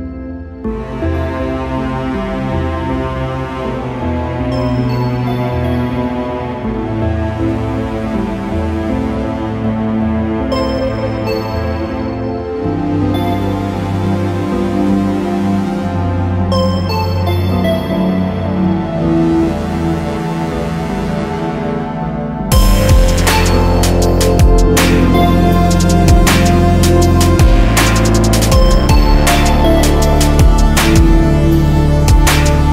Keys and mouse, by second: 0.2 click, 1.3 click, 3.1-4.2 drag, 3.1 right click, 4.2 middle click, 6.0 right click, 8.0 middle click, 10.1-11.5 middle drag, 13.5 right click, 14.8 click, 15.9 click, 25.8-32.7 drag.